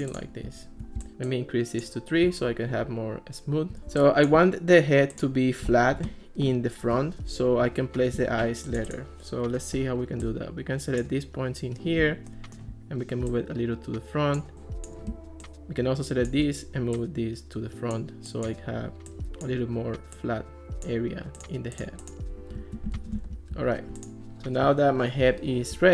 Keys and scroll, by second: 14.5 super+z, 23.2 alt+r.